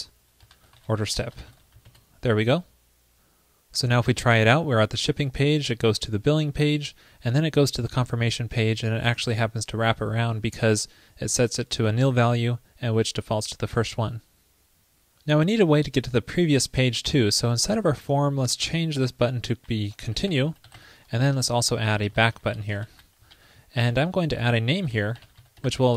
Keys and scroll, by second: 1.9 super+s, 21.4 ctrl+shift+d, 22.3 alt+shift+Left, 23.4 alt+Right.